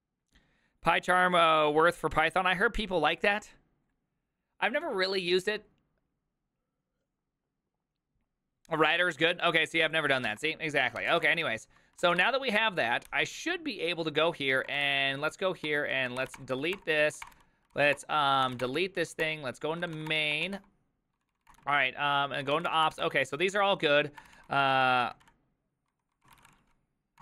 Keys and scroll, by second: 10.8-12.2 typing, 12.0 ctrl+c, 12.0 Return, 12.3 Return, 13.1 ctrl+h, 14.5-27.2 typing.